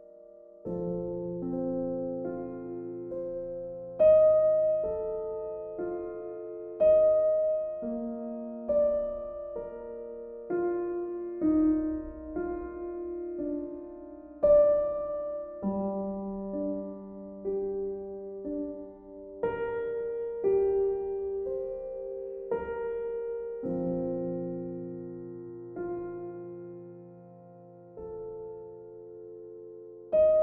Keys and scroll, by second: 0.1 b, 6.7 ctrl+z, 13.6 ctrl+z, 22.1 b, 24.6 ctrl+z, 27.4 ctrl+z, 29.2 ctrl+z.